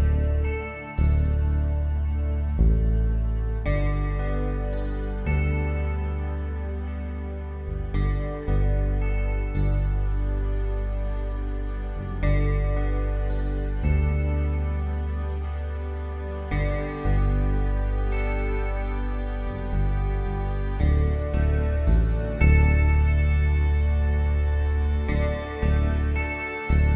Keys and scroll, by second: 2.7 ctrl+j, 3.5 ctrl+t, 7.4 space, 11.0 Return, 11.3 d, 17.1 alt+shift+Delete, 17.8 ctrl+d, 18.9 Down, 26.5 ctrl+t.